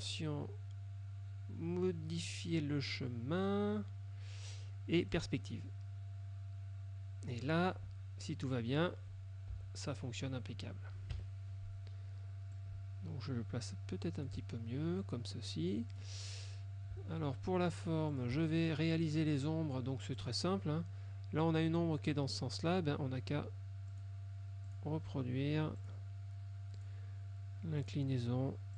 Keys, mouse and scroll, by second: 5.2 click, 8.6 click, 9.6 Delete, 11.2 KP_Subtract, 12.6-14.5 ctrl+drag, 16.0 click, 18.2 shift+click, 20.3 click, 24.1 click, 24.8 click, 25.9 click, 26.9 click, 27.9 click.